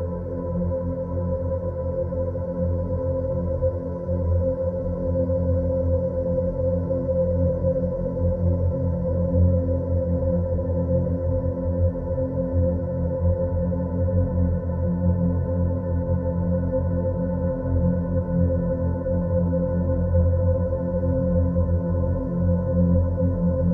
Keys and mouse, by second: 1.0-3.2 drag, 6.2-8.9 drag, 9.9 s, 13.4 g, 17.0 Tab, 17.5-18.2 middle drag, 18.5 3, 18.7 click, 23.1-23.7 drag.